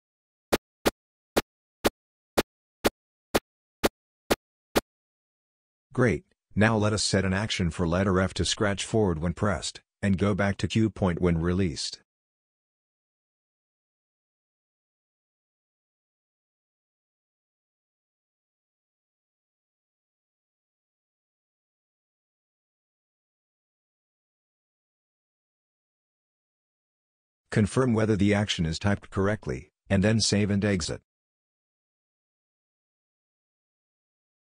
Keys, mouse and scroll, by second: 0.5 y, 1.3 y, 2.4 y, 3.3 y, 4.3 y, 13.0 click, 15.0 click, 17.0-22.5 typing, 17.7 click, 20.9 Right, 23.6-26.1 typing.